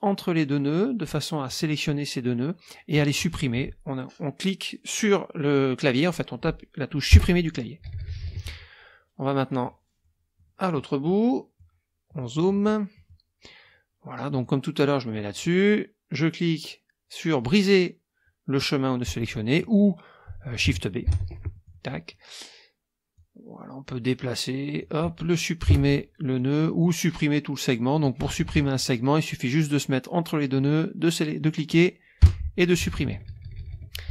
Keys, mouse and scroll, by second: 1.4 click, 7.1 Delete, 9.4 scroll down 2, 9.6 click, 10.4 click, 11.0 click, 12.1 click, 12.9 click, 14.3 click, 19.0 click, 21.0 shift+b, 21.5 shift+click, 23.1-25.0 drag, 25.6 Delete, 26.6 click, 28.4 KP_Subtract, 30.6 click, 32.2 Delete, 33.3 KP_Subtract.